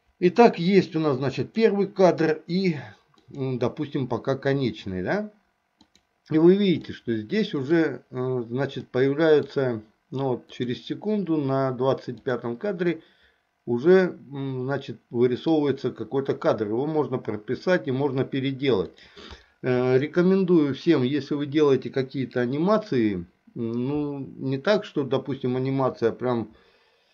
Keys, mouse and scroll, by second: 1.6 click, 3.4 click, 6.0 click, 7.0-8.0 middle drag, 9.0 middle click, 10.7 click, 12.3 click, 13.0-15.7 middle drag, 19.0 click.